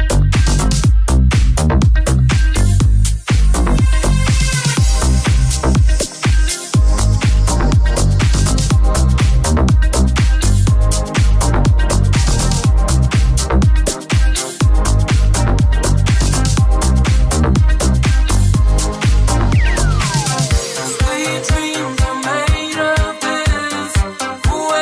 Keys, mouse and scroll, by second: 1.9 right click, 2.5 g, 4.4 shift+right click, 5.5 right click, 5.5 j, 6.0 g, 7.5 right click, 7.5 shift+middle click, 8.0 shift+right click, 8.0-13.1 shift+middle drag, 8.9 right click, 8.9 j, 9.3 g, 11.2 right click, 11.7 g, 13.1 shift+right click, 13.2 shift+middle click, 14.1 right click, 14.1 j, 14.1-24.4 middle drag, 14.9 g, 22.6 Tab, 23.1 right click, 24.4-24.8 ctrl+middle drag.